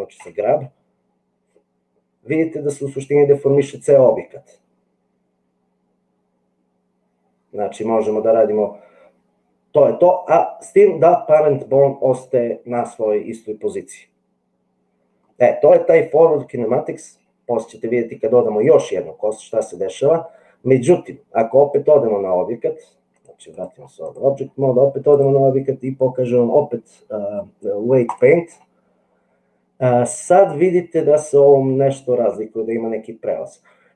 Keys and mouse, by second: 0.2 g, 23.1 click, 25.4-28.4 drag.